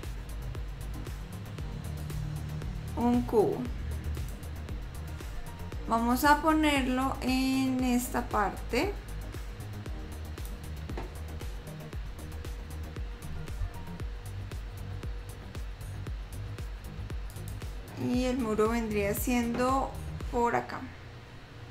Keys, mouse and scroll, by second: 2.2 click, 6.5 click, 8.4 click, 12.3 s.